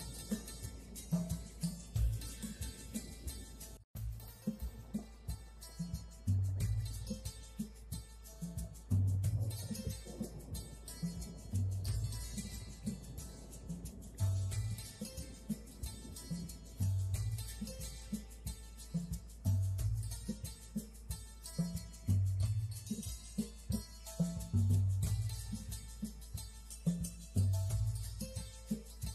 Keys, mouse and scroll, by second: 0.4 click, 0.8 click, 1.1 click, 1.9 click, 2.9 click, 4.0 click, 4.2 middle click, 4.9 click, 5.8 click, 6.5 click, 7.6 click, 11.8 click, 12.1 click, 12.4 scroll up 1, 12.7 click, 13.8 click, 15.0 click, 16.2 click, 17.4 click, 21.1 click, 23.2 click, 23.7 click, 25.9 click, 26.4 click.